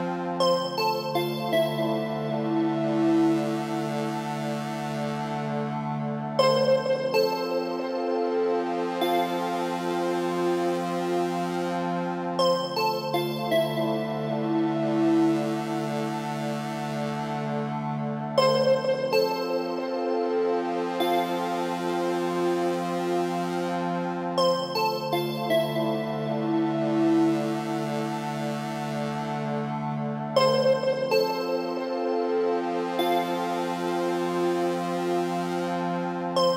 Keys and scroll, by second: 19.0 Right, 21.9 Up, 22.9 Right, 27.7 Left, 31.1 Up, 31.8 Down.